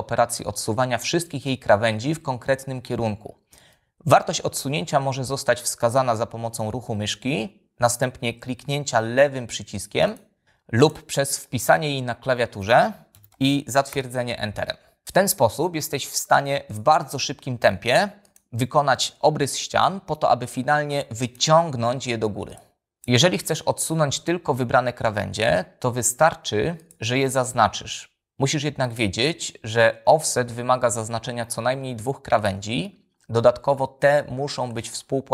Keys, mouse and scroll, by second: 10.4 click, 11.0-12.7 drag, 13.4-14.2 typing, 14.6 Return, 16.0 f, 17.3 click, 18.5 click, 19.6 p, 21.1 click, 22.4 click, 25.5 space, 26.7 click, 32.3-32.8 shift+drag.